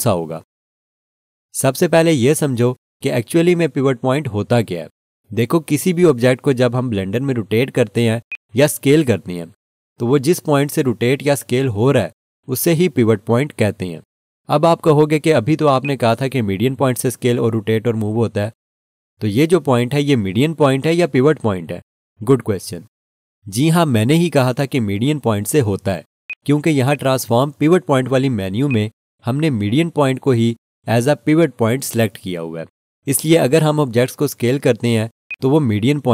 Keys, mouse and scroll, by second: 8.3 click, 10.7 r, 15.8 right click, 26.3 alt+shift+click, 26.9 alt+shift+click, 35.3 click.